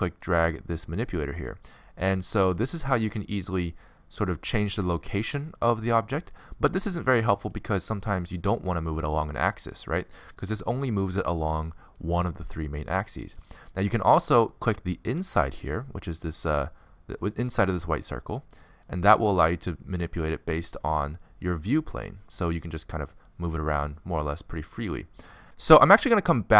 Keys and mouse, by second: 0.0-1.9 drag, 1.9 middle click, 2.8-6.8 drag, 7.7-9.5 drag, 10.9-12.8 drag, 13.3-15.1 drag, 18.9-24.6 drag.